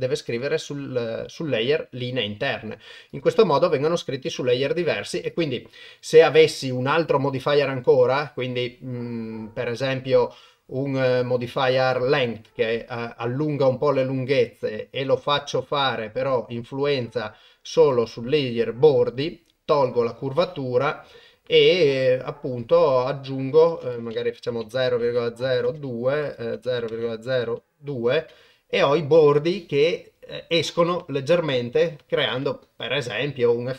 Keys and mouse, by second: 3.1 click, 5.3-12.3 drag, 16.2 click, 17.0-18.1 drag, 19.7 click, 22.9 shift+click, 23.9-31.7 drag.